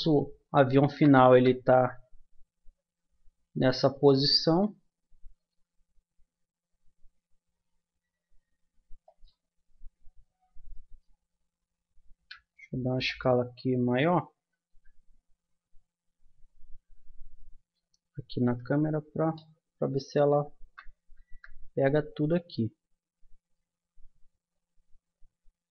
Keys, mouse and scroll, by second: 0.0 Escape, 1.3 KP_0, 3.9-5.5 right drag, 5.7 g, 12.1 s, 14.7 KP_0, 18.4 s, 21.1 KP_0.